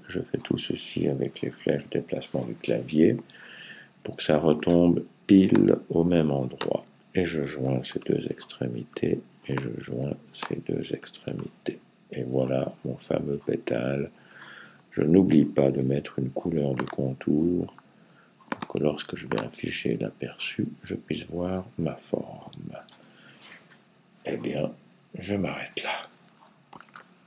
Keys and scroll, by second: 7.7 super+j, 11.1 super+j.